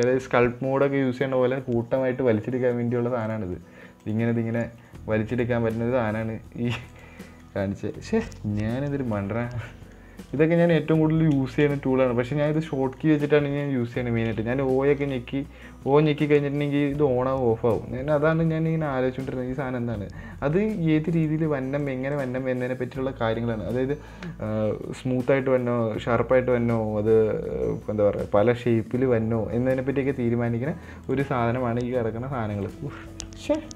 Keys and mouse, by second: 2.9 right click, 3.7 click, 4.0 right click, 4.7 middle click, 5.3 click, 5.8 middle click, 5.8 click, 6.1 click, 6.9 click, 7.6 middle click, 8.0 Tab, 8.3 middle click, 9.0 middle drag, 9.5 Tab, 9.6 middle click, 10.1 middle click, 10.8 right click, 11.1 right click, 11.9 shift+right click, 12.2 middle click, 12.9 right click, 13.4 middle click, 13.8 shift+middle click, 14.3 right click, 15.1 o, 16.8-20.8 o, 20.8 right click, 22.6-29.8 drag, 31.5-32.8 drag, 32.9 right click, 33.4 middle click.